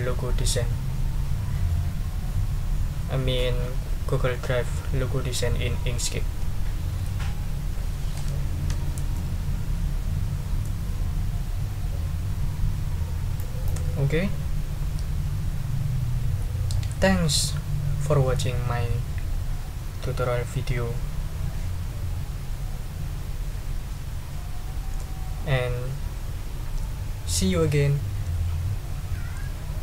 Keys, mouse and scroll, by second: 9.1-10.8 middle drag, 13.4 click, 13.6 scroll up 1.